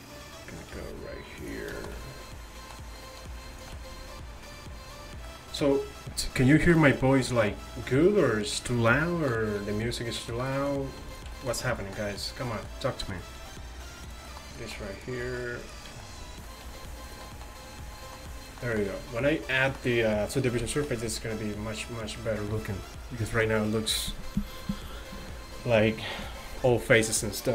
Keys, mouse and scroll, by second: 0.8 g, 3.6 click, 3.9 right click, 5.1-7.9 middle drag, 9.7 g, 11.1-13.4 right drag, 13.4-15.0 drag, 13.4 g, 15.0-16.7 right drag, 16.7 click, 16.7 g, 17.5-18.7 middle drag, 18.9 middle click, 21.0-23.4 middle drag.